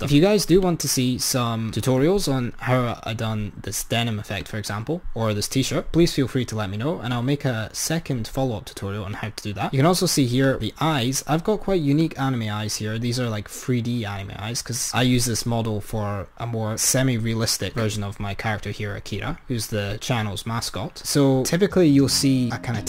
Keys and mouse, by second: 0.7-2.8 drag, 4.4-6.4 drag, 7.2-10.6 drag, 12.1 click, 17.9 click.